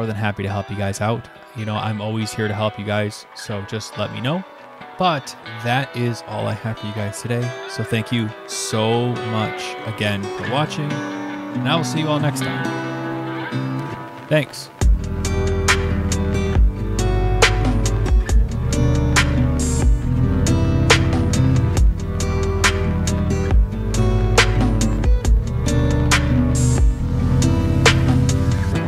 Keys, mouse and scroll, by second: 0.5 click, 1.7 click, 7.8 click, 9.0 click, 12.6 click, 13.8 click.